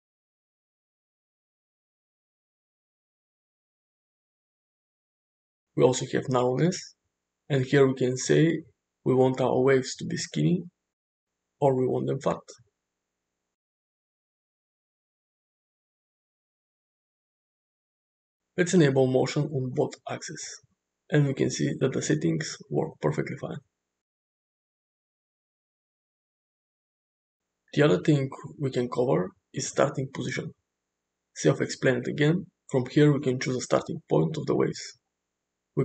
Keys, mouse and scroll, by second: 2.3-4.6 drag, 7.4-11.1 drag, 13.2-18.5 drag, 19.9 click, 21.5-23.8 drag, 24.3-28.0 drag, 30.9 click, 34.9-35.8 drag.